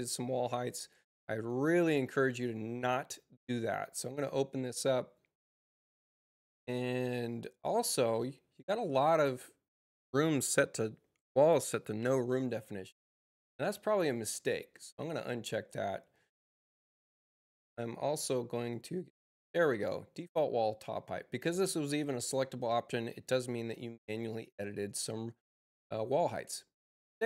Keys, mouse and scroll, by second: 1.2 click, 2.2 click, 3.7 click, 13.6 click, 14.3 click, 18.4 click, 20.1 click, 23.2 click.